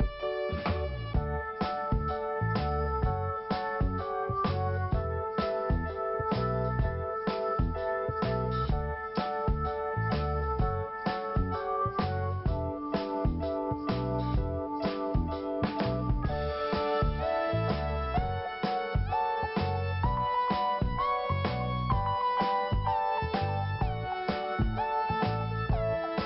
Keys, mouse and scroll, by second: 0.9 click, 5.6 click, 5.6 click, 6.7 click, 8.9 click, 12.9 click, 13.0 click, 13.9 click, 17.4 click, 19.3 scroll down 1, 20.1-20.5 scroll up 2, 20.9-21.2 scroll down 1, 21.7 click.